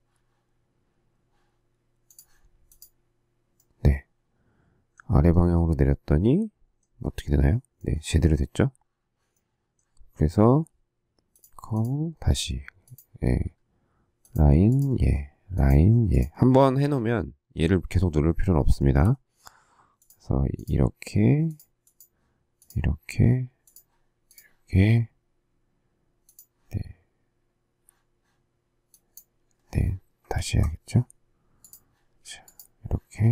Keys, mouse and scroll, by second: 18.8 shift+middle click, 30.3 ctrl+z.